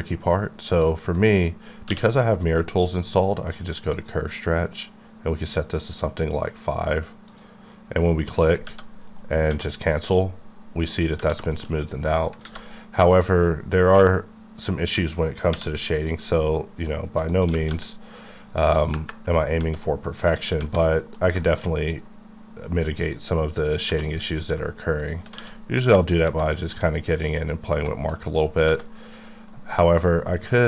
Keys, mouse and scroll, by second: 1.9 q, 3.9 click, 4.9-6.0 scroll down 1, 6.2-7.3 scroll up 1, 9.1 right click, 11.5 shift+middle click, 11.8 scroll up 3, 12.4 alt+a, 15.6 k, 17.2 click, 17.7 z, 18.5 click, 19.3 KP_Enter, 19.5 scroll down 2, 19.8 middle click, 20.1 scroll down 1, 20.4 shift+middle click, 23.0 middle click, 23.4 shift+click, 23.9 2, 24.3 click, 25.3 q, 26.0 click, 26.5 scroll down 2, 26.7 middle click, 28.1 middle click, 30.0-30.5 scroll up 1, 30.5 click.